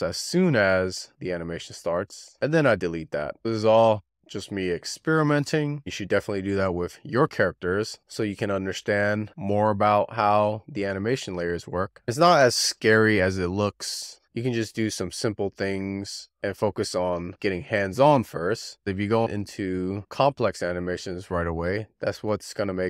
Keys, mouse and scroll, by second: 0.0-0.4 drag, 0.4-0.9 scroll down 2, 1.1 z, 1.5-2.8 drag, 2.8 x, 3.5 scroll down 5, 3.7 click, 3.9 click, 4.1 scroll up 1, 4.4 click, 5.5-5.9 drag, 8.8 scroll down 3, 9.0 scroll up 3, 9.3 click, 11.0-11.5 drag, 11.5 shift+d, 12.1 click, 13.7 click, 14.4 z, 15.1 click, 15.6 click, 16.8 click, 17.4 click, 18.1 click, 19.5 click, 19.9 scroll up 2, 20.0 click, 20.2 shift+middle drag, 21.4 shift+click, 22.0 z, 22.5 click.